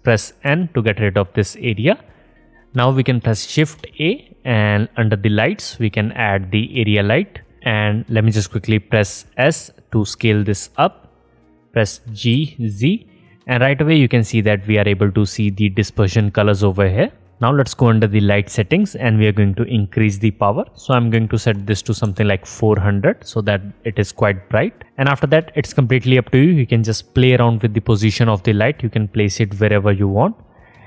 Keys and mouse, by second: 2.8 shift+a, 8.3 s, 9.9-13.2 drag, 11.2 g, 13.2-19.1 middle drag, 21.0 KP_0, 23.1-24.3 middle drag, 24.5-25.9 middle drag, 26.0-27.6 middle drag, 27.6 g, 29.7 r.